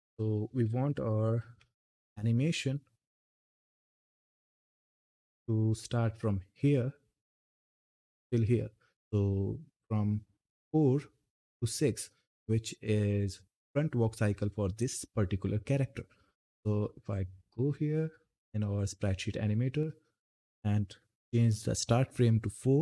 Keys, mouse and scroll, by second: 0.2 Up, 6.5 click, 11.9 scroll down 1, 16.6-20.0 drag.